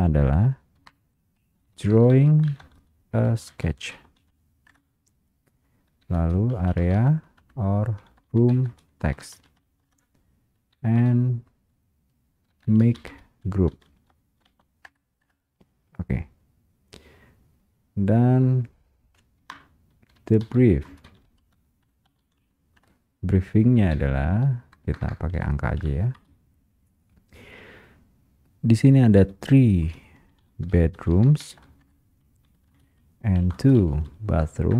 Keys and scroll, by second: 4.9 space, 5.0 Return, 6.3 space, 9.9 space, 9.9 Return, 11.1 space, 14.9 space, 14.9 Return, 20.9 Return, 21.0 space, 22.9 Return, 24.5 space, 26.3 space, 31.9 space, 31.9 Return, 32.9 space.